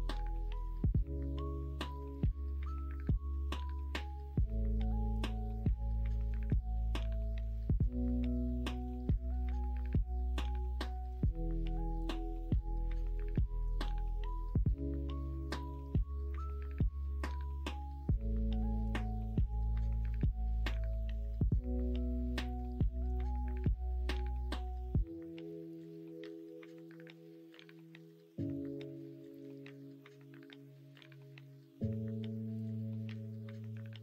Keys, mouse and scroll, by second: 1.9 middle click, 2.6 middle click, 3.0 shift+middle click, 3.8 ctrl+r, 6.8-13.9 middle drag, 14.2 shift+middle click, 14.9 middle click, 16.8 middle click, 17.3 middle click, 17.9 ctrl+z, 18.1 ctrl+z, 19.4 click, 20.0 2, 20.4 click, 21.1 shift+click, 22.6 shift+click, 23.4 f, 24.0 click, 24.3 middle click, 25.2 shift+click, 25.5 middle click, 26.0 ctrl+z, 26.7 shift+click, 27.1 middle click, 27.8 f, 28.6 click, 29.1 shift+click, 30.3 middle click, 30.9 shift+middle click, 31.8 middle click, 32.2 middle click, 33.2 middle click.